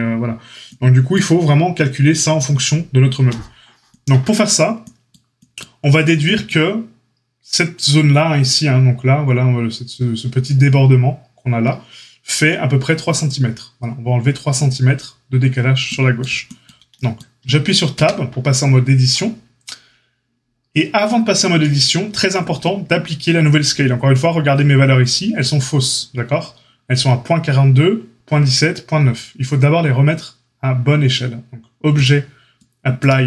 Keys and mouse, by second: 18.0 Tab, 22.4 Tab.